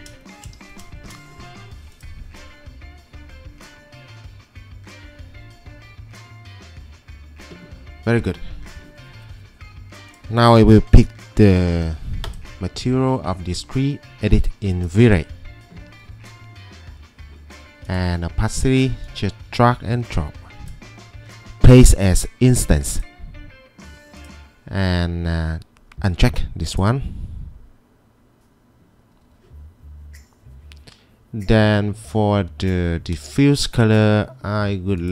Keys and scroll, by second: 11.5 b.